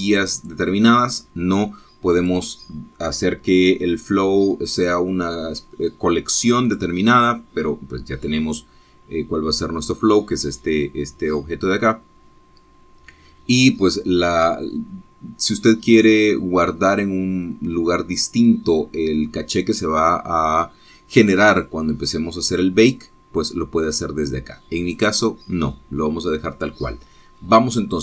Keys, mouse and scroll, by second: 1.8 click, 3.5 click, 8.0 click, 14.0-14.6 scroll down 1, 15.8-16.1 scroll down 1, 26.3 click.